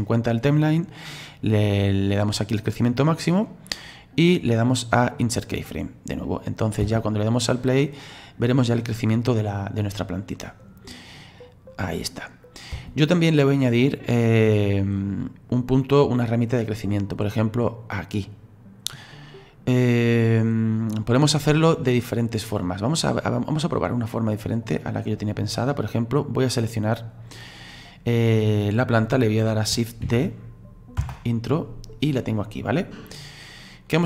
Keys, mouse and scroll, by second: 2.4-3.9 drag, 3.9-6.2 right drag, 6.2 click, 6.8 space, 12.7 space, 13.8 click, 15.0-18.0 middle drag, 18.1 click, 22.6-25.7 drag, 26.4 right click, 30.0 shift+d, 31.9-32.9 drag, 32.9-34.0 scroll down 4.